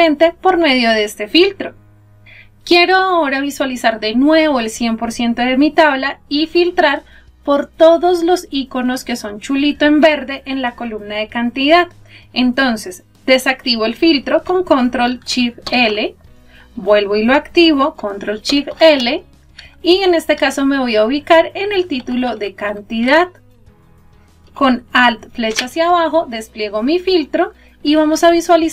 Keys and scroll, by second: 14.5 ctrl+shift+l, 25.2 alt+Down.